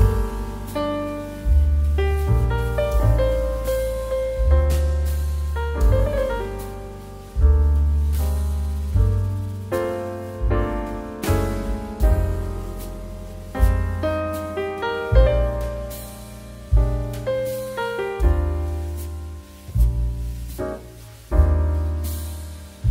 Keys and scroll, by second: 14.2 space, 17.6 space.